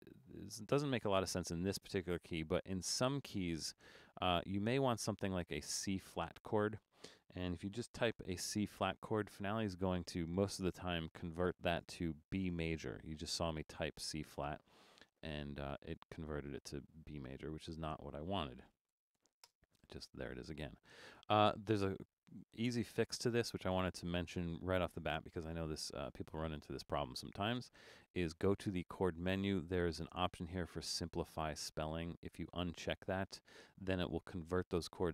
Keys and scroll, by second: 7.8 shift+c, 8.4 b, 9.3 space, 15.5 super+=, 18.7-19.7 typing.